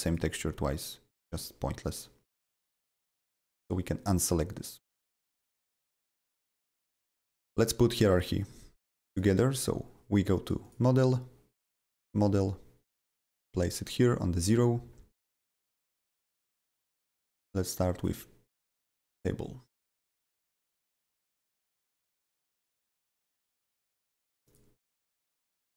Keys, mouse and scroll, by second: 0.0 click, 1.1 click, 2.2 click, 3.4 click, 5.7 click, 8.2 middle click, 9.1 click, 10.6 click, 12.0 click, 12.8 click, 13.8 middle click, 17.3 click, 18.0 click, 18.8 ctrl+c, 19.1 click, 19.2 click, 19.8 click, 20.4 click, 21.1 ctrl+v, 21.6 click, 22.4-25.7 drag.